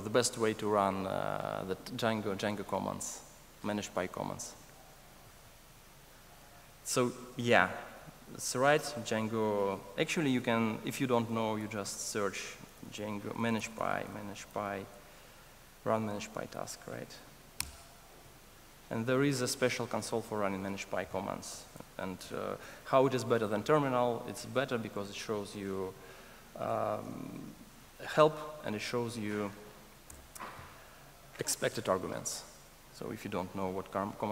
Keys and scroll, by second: 10.3 ctrl+shift+super+a, 13.5 alt+BackSpace, 30.1 Return.